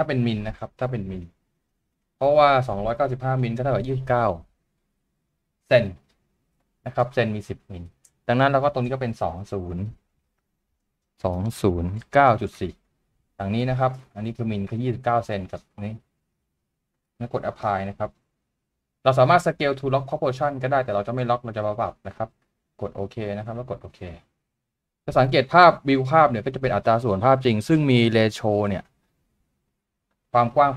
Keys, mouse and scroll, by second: 11.3 typing, 24.1-25.0 scroll down 1, 25.2-25.6 scroll down 1, 25.6 scroll up 1, 26.3 typing.